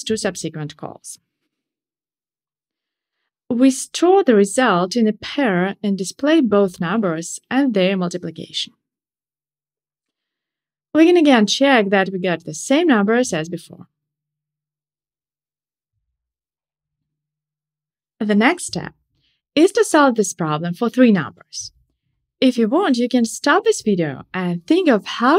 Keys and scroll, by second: 8.1 Tab, 9.4 shift+super+Return, 10.1 Tab, 14.6 ctrl+shift+r.